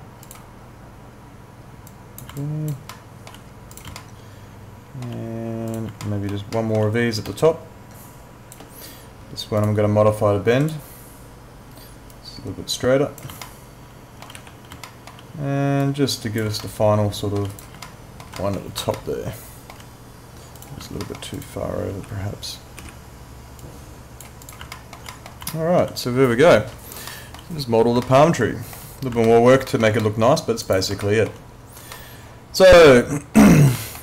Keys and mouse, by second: 2.4 alt+click, 2.9 alt+middle click, 3.7 click, 4.0 alt+middle click, 5.7 click, 6.0 alt+middle click, 7.4 shift+click, 9.6 click, 13.5 alt+middle click, 14.3 w, 14.9 alt+middle click, 15.8 click, 16.6 alt+middle click, 17.5 click, 17.9 alt+middle click, 18.9 alt+middle click, 20.6 click, 21.0 alt+middle click, 21.4 click, 22.8 e, 23.6 click, 24.7 alt+middle click, 25.5 alt+middle click, 27.1 alt+middle click, 28.1 alt+middle click, 29.3 alt+middle click, 30.0 alt+middle click, 30.7 click, 31.1 alt+middle click, 31.9 alt+middle click, 33.8 alt+middle click.